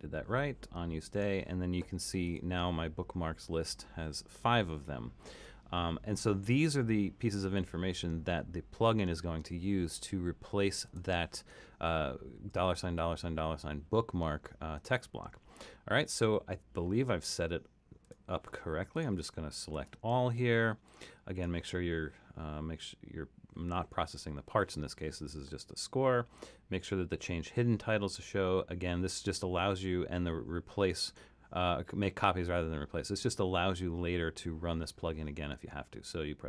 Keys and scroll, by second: 19.8 super+a.